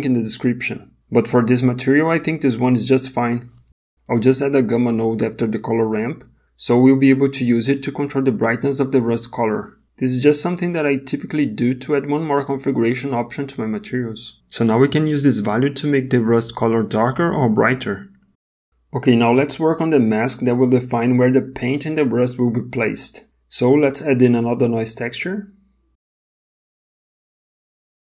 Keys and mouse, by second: 1.3 g, 3.0 click, 4.4 shift+a, 9.4 middle click, 12.4-17.1 shift+drag, 18.6 middle click, 19.5 middle click, 20.0 middle click, 22.4 shift+a.